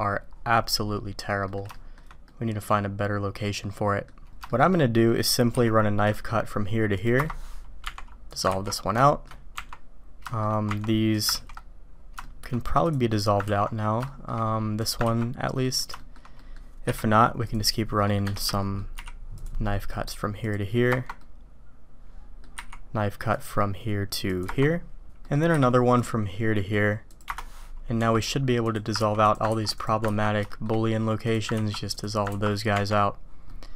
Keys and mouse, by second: 1.4 click, 1.7 shift+drag, 2.2-4.1 drag, 4.5 shift+click, 7.8 Tab, 8.6 ctrl+x, 9.0 shift+drag, 9.5 Tab, 10.3 shift+click, 10.9 Tab, 11.1 click, 11.4 ctrl+x, 12.2 shift+drag, 12.8 click, 13.1 click, 14.0 shift+click, 14.9 click, 15.6 click, 16.0 shift+click, 16.3 click, 16.8 k, 18.4 Escape, 18.6 click, 18.9 k, 21.2-22.4 drag, 25.2 click, 28.0 Tab, 29.0 ctrl+x, 29.2 click, 29.7 click, 30.2 ctrl+x, 30.5 shift+drag, 31.1 click, 31.7 ctrl+x, 31.9 click, 32.7 Tab, 33.5-33.7 drag.